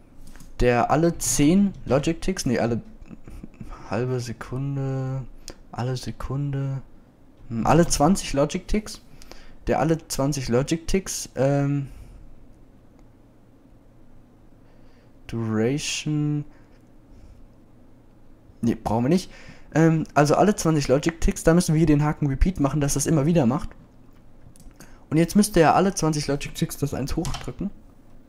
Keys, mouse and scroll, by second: 27.5 click.